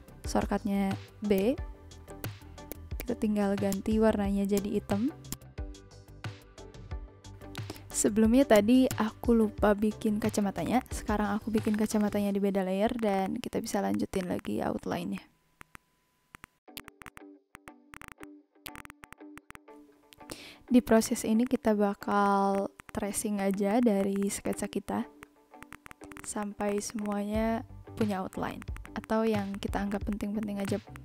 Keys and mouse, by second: 1.2 ctrl+z, 1.3 click, 2.2 v, 2.2 click, 2.7 click, 3.3 b, 3.6 click, 4.5 click, 8.5 click, 9.6 b, 10.4 click, 10.6 click, 11.6 click, 12.0 click, 12.9 click, 13.9 click, 14.2 click, 14.3 v, 14.4 click, 15.1 click, 15.3 click, 15.6 click, 15.7 click, 16.2 ctrl+z, 16.3 click, 16.7 ctrl+z, 16.7 click, 17.4 v, 17.5 click, 18.2 v, 18.2 click, 18.4 b, 18.6 click, 19.1 click, 19.3 click, 20.3 click, 20.9 click, 21.2 click, 21.4 click, 22.0 click, 22.0 ctrl+z, 22.1 click, 22.2 click, 22.4 ctrl+z, 22.5 a, 22.5 click, 22.8 click, 23.1 b, 23.3 click, 23.4 z, 23.5 click, 23.7 click, 23.8 click, 24.0 click, 24.4 click, 24.8 click, 25.2 click, 25.6 click, 26.1 click, 26.4 click, 26.5 v, 26.6 click, 26.8 a, 26.9 click, 27.1 click, 27.5 b, 28.5 click, 28.7 click, 28.9 ctrl+z, 29.0 click, 29.2 click, 29.4 click, 29.5 click, 29.8 a, 29.9 click, 30.1 click, 30.3 b, 30.4 click, 30.5 a, 30.6 click, 30.9 click.